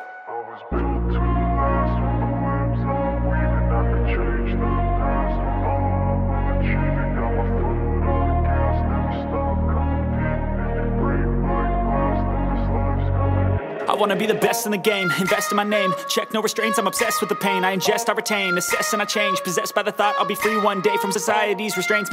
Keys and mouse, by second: 0.6 shift+middle drag, 0.9-1.3 middle drag, 1.4 shift+middle click, 2.1 middle click, 5.0 KP_1, 5.6 click, 6.5 shift+click, 6.9 shift+click, 7.6-8.8 shift+drag, 9.6 shift+click, 9.9 shift+click, 10.8 ctrl+l, 12.7 z, 13.4 shift+middle drag, 13.7 click, 13.9 middle click, 14.9-17.4 middle drag, 17.8 shift+middle drag, 19.2 shift+middle click, 19.5 shift+middle click, 19.6 middle click, 20.1 middle click, 20.5 shift+middle drag, 20.7 middle click, 20.9 shift+middle click, 21.5 middle click.